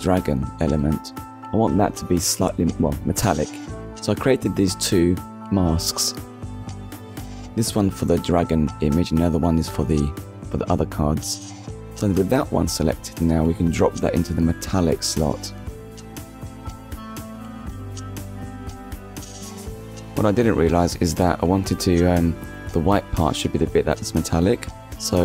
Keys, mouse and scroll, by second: 1.8-2.4 scroll up 2, 2.9 click, 5.6 click, 7.2 click, 8.6 scroll down 1, 9.0 middle click, 9.6 scroll down 1, 10.8 click, 11.7 middle click, 14.5 click, 18.8 middle click, 22.0 middle click, 22.4 click, 23.4 shift+s, 24.2 click, 25.1 click.